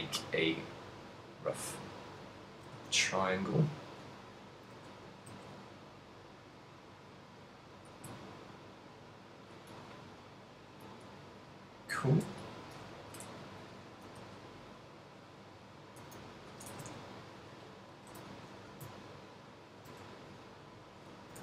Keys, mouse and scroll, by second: 1.7 click, 2.4 right click, 2.9 g, 4.4 click, 4.6 s, 8.2 click, 8.4 z, 8.5 middle click, 10.3 right click, 11.0 middle click, 12.0 l, 12.9 KP_7, 13.5 z, 13.9 s, 16.7 click, 16.9 z, 17.1 middle click, 18.1 g, 19.8 ctrl+click, 20.6 middle click, 21.3 g.